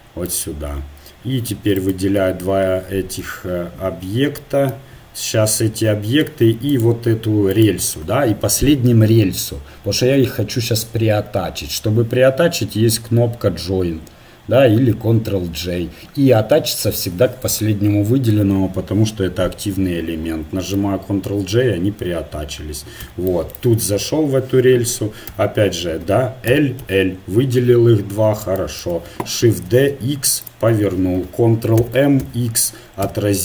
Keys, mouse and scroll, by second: 0.3 shift+d, 1.7-3.5 right drag, 6.7-14.7 right drag, 21.3 ctrl+j, 23.0 z, 23.7 Tab, 25.3 a, 26.5 l, 26.5 l, 26.8 l, 27.6 KP_1, 29.4 shift+d, 31.8 ctrl+m.